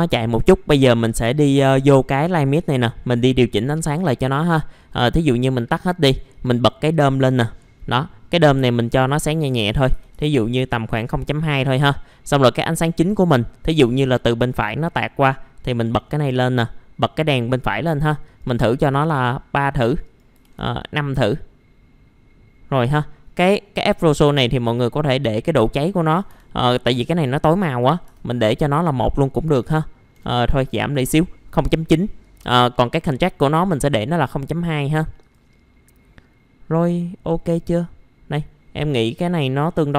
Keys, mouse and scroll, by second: 2.1 click, 9.5 KP_0, 9.7 KP_Decimal, 9.9 KP_2, 15.7 click, 18.8 KP_3, 19.8 click, 20.3 KP_5, 23.3-24.4 drag, 26.1 KP_0, 26.3 KP_Decimal, 27.1 click, 27.8 KP_1, 30.1 KP_0, 30.3 KP_Decimal, 30.5 KP_9, 32.2 click.